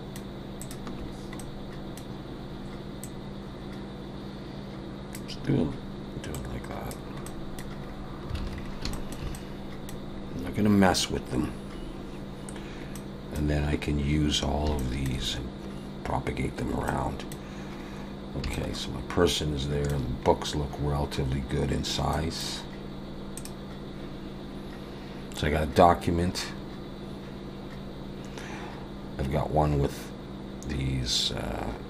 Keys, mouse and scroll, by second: 0.6 shift+click, 1.1-1.4 scroll down 2, 1.4 middle click, 3.0 click, 6.3 click, 7.3 middle click, 7.8-8.9 scroll down 5, 8.4 alt+a, 8.9 shift+middle click, 9.3 middle click, 10.3-10.9 scroll up 1, 10.9-11.5 scroll up 2, 12.9 middle click, 14.3 scroll down 1, 14.8 shift+middle click, 16.3 scroll down 1, 16.9 middle click, 17.9-18.4 scroll down 2, 18.5 shift+middle click, 20.2-21.1 scroll up 2, 21.8-22.1 scroll down 1, 22.1 middle click, 22.4 scroll up 1, 22.5-23.1 scroll down 1.